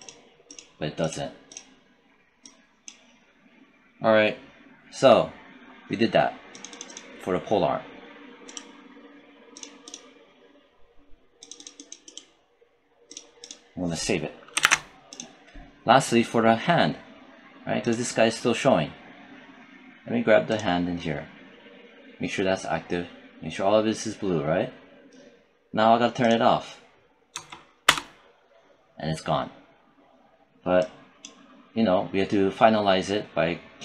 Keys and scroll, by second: 14.5 ctrl+s, 27.2 0, 27.7 Return.